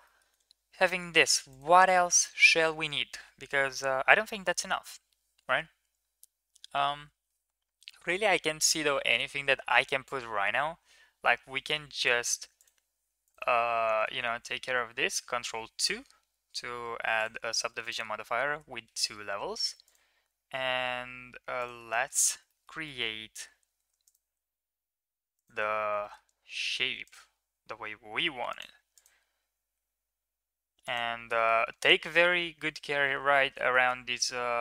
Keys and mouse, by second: 0.1 Tab, 13.1 middle click, 13.2 Tab, 13.7 shift+middle drag, 14.0 Tab, 15.1 ctrl+2, 17.3 shift+middle click, 17.8 Tab, 18.5 shift+middle drag, 19.4 ctrl+r, 22.3 middle click, 22.8 middle click, 23.6 ctrl+r, 26.0 middle click, 28.7 ctrl+r, 31.2 shift+middle click, 32.1 middle click, 33.6 shift+middle click.